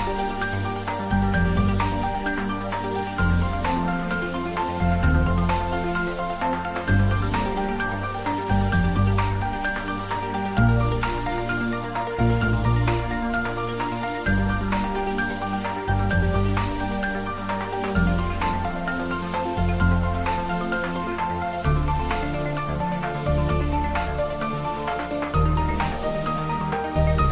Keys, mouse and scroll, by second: 1.8 click, 2.9-4.2 scroll down 1, 4.5 click, 11.1 click, 13.3-27.3 drag.